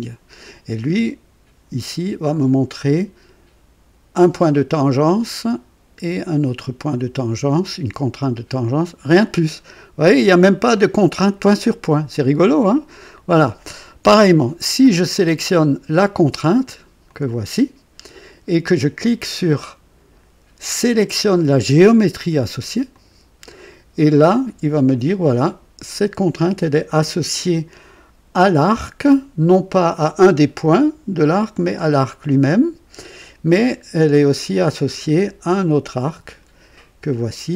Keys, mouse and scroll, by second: 1.8-3.3 drag, 5.1-10.8 drag, 15.1 click, 17.0 click, 22.9 click.